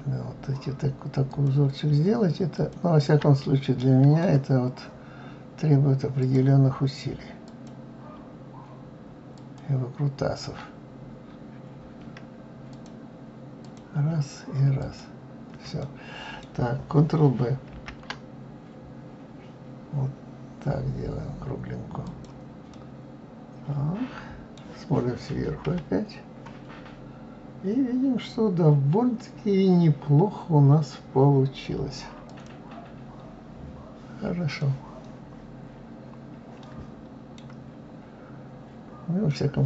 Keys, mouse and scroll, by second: 1.3 click, 2.5 ctrl+click, 3.4-6.2 middle drag, 6.2 click, 7.5 click, 9.3 ctrl+click, 12.7 click, 13.6 click, 14.8 shift+click, 15.8-17.7 middle drag, 17.7 ctrl+b, 22.7-25.6 middle drag, 25.6 KP_7, 32.3 click, 34.5 scroll up 1, 34.6-37.6 middle drag, 37.7 scroll down 1, 39.3-39.6 middle drag.